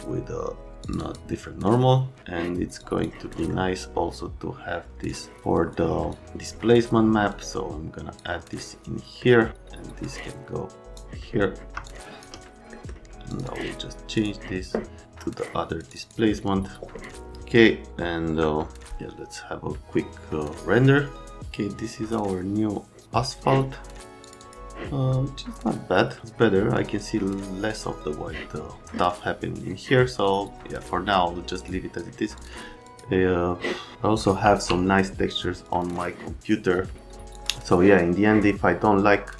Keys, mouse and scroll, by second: 2.8 click, 3.3 middle click, 5.1 click, 5.7 ctrl+click, 7.3 click, 8.5 click, 10.0 right click, 11.8 click, 12.7 right click, 13.3 click, 13.4 click, 14.1 click, 24.2 click, 24.4 click, 31.5 click, 32.3 click, 32.8 click, 34.4 e, 35.6 click, 35.7 click, 37.3 click.